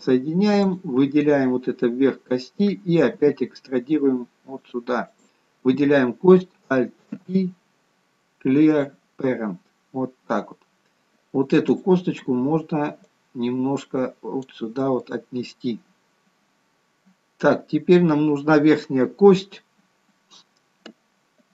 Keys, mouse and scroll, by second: 0.5 click, 3.1 e, 5.1 click, 7.1 alt+p, 9.4-10.0 scroll down 2, 11.9 click, 11.9-12.7 scroll down 2, 15.0 middle click, 17.7-20.7 scroll down 2.